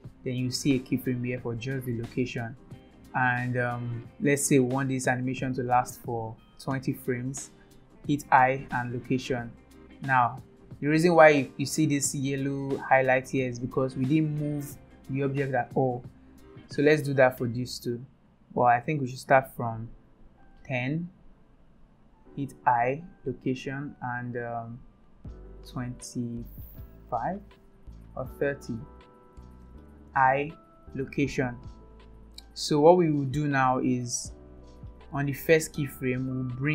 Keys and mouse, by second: 3.4-6.0 drag, 6.1 space, 6.5 click, 6.5 space, 8.3 i, 10.1-11.4 drag, 13.9-14.9 drag, 17.3 click, 19.2-21.3 drag, 22.7 i, 24.3-29.4 drag, 30.2 i, 35.2 click.